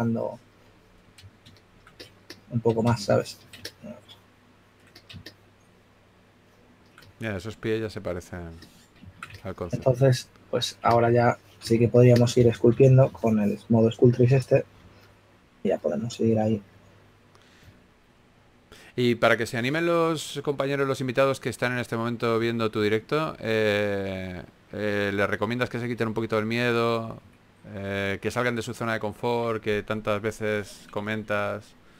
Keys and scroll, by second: 0.0 shift+f, 12.0-14.0 typing, 15.1-15.9 typing, 26.7-28.5 typing, 30.3 typing, 31.7 s.